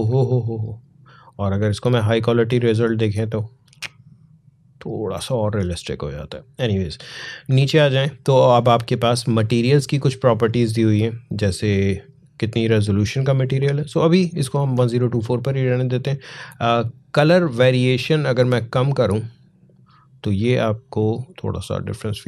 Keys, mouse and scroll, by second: 2.2 click, 5.3 click, 6.7-9.1 scroll down 1, 10.0-14.3 drag, 17.4-21.7 drag, 21.7-22.2 drag.